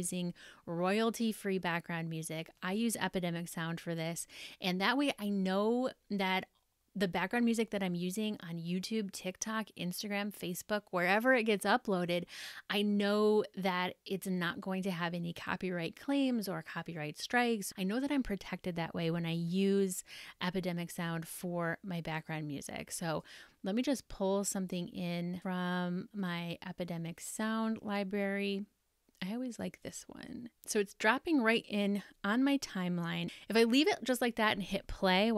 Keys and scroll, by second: 20.1 super+Tab.